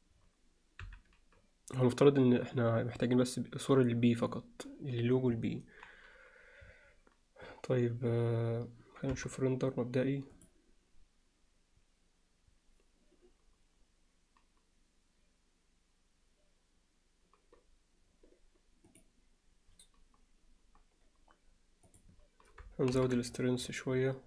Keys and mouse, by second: 0.9 KP_1, 9.1 KP_0, 18.9 click, 22.0-22.8 drag, 22.8 KP_0, 23.0 KP_7.